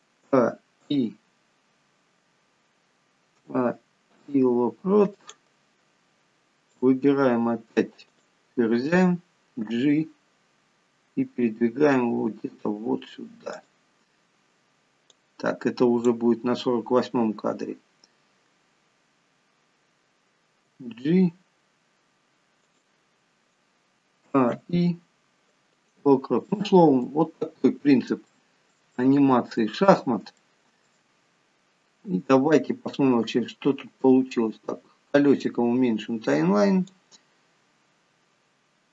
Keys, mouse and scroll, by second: 0.6 a, 1.1 a, 1.3 a, 1.3 i, 3.8-4.5 a, 4.5 i, 7.1 click, 8.5 click, 9.9 g, 15.5 click, 21.0 g, 24.6 a, 24.9 i, 26.9 middle click, 28.0-28.5 scroll down 3, 28.6 shift+middle click, 29.4 middle click, 30.2 scroll up 5, 30.7 shift+middle click, 34.0-36.3 scroll down 33, 36.3-37.0 scroll up 2, 37.3 click.